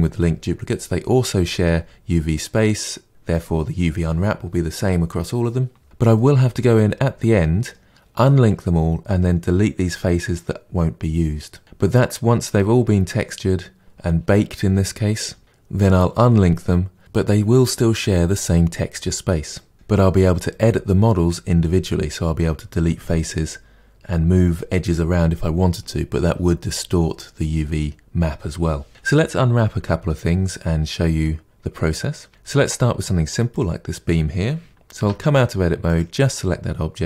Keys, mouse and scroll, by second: 6.1-11.6 middle drag, 32.3-33.4 shift+middle drag, 33.4-33.8 drag, 34.9 Tab, 35.8 click, 35.9-36.5 middle drag.